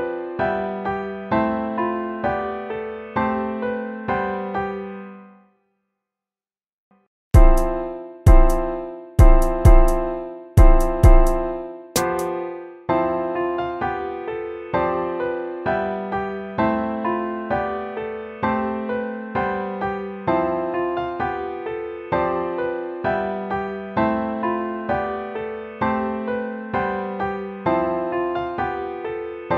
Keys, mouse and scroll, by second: 2.3 ctrl+z, 4.0 ctrl++, 5.3 ctrl+-, 11.1 right click, 11.9 right click, 12.2 BackSpace, 21.2 ctrl+-, 25.2 ctrl+c, 26.2 ctrl+v, 26.8 ctrl+v, 27.9 ctrl+v, 28.5 ctrl+v.